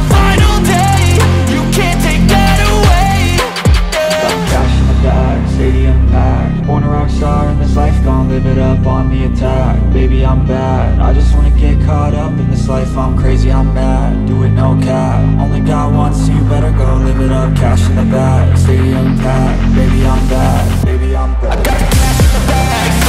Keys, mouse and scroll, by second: 1.9 ctrl+z, 2.2 ctrl+z, 2.5 ctrl+z, 4.7 scroll down 1, 4.8 alt+middle click, 5.2 scroll up 1, 5.4 alt+middle click, 7.2 alt+click, 9.2 alt+click, 11.2-11.7 scroll down 1, 11.7 alt+middle click, 12.4 scroll up 2, 14.2-15.1 scroll down 1, 15.3-15.7 scroll up 1, 15.7 typing, 16.4 shift+click, 16.7 right click, 18.1 ctrl+z, 19.9 alt+middle click, 20.4 shift+click, 21.7 right click.